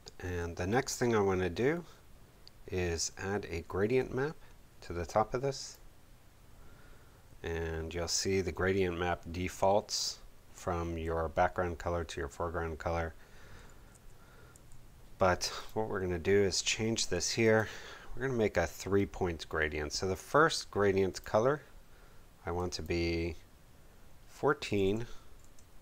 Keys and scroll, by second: 0.3 space, 13.9 x, 24.4-25.8 typing, 25.4 Tab.